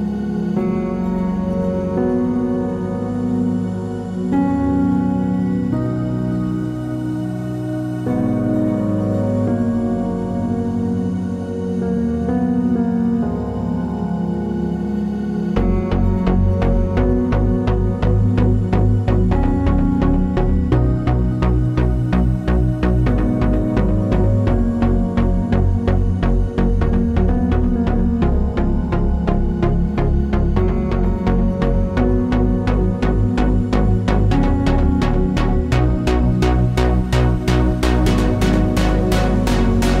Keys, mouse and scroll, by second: 1.3 scroll up 2, 2.0 scroll down 2, 3.4 alt+d, 3.8 click, 3.9 r, 6.8 click, 7.0 alt+d, 7.3 click, 7.5 r, 8.6 click, 9.3 click, 9.5 g, 10.2 click, 10.7 alt+d, 12.1 click, 12.2-17.3 middle drag, 14.2 scroll down 1, 17.3 click, 18.9 shift+click, 19.2 click, 19.6 shift+click, 20.0 click, 20.4 shift+click, 21.0 scroll up 2, 21.1-23.0 shift+middle drag, 22.1-23.0 scroll up 2, 23.0 shift+click, 23.6 shift+click, 24.6-31.7 drag, 31.9 click, 32.7 shift+d, 33.9 r, 34.8 click, 34.9 g, 35.4 click, 35.8 Tab, 35.8-37.4 middle drag, 37.4 click, 37.8 1, 37.9 click, 38.2-40.0 middle drag, 39.2 g.